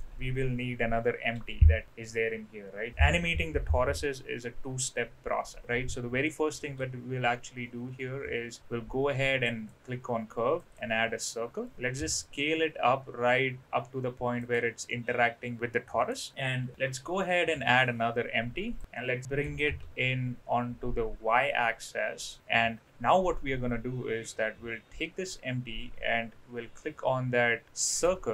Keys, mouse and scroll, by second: 1.3 KP_7, 6.6 shift+a, 12.0 s, 14.9-16.1 middle drag, 16.1-16.7 scroll down 1, 16.7 KP_7, 17.5 shift+a, 19.4 g, 27.9 ctrl+click.